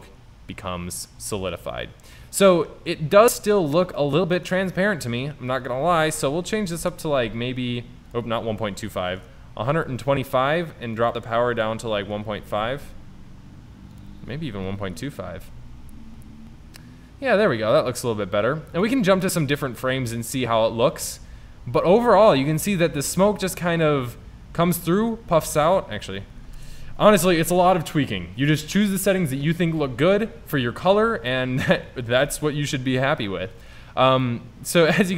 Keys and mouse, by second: 1.2-2.2 middle drag, 23.2-24.7 drag, 26.5 KP_0, 32.4 KP_0.